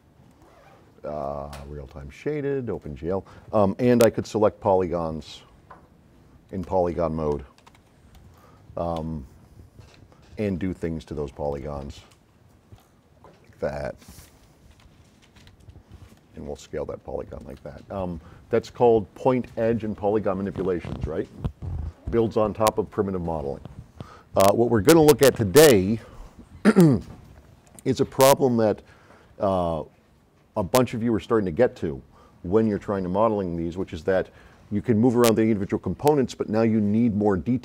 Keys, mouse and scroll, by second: 0.3 drag, 2.8 click, 4.0-5.2 right drag, 4.0 s, 6.5 click, 7.8 F9, 8.2 click, 10.0 s, 11.6 click, 12.1 click, 13.1 middle click, 14.3 v, 15.0 c, 15.7 x, 16.2-17.6 drag.